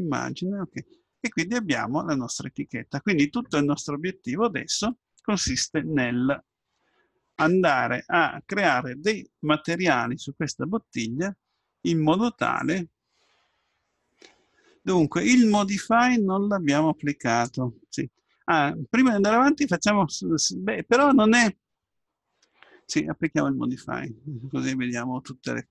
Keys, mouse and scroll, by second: 1.5-3.7 middle drag.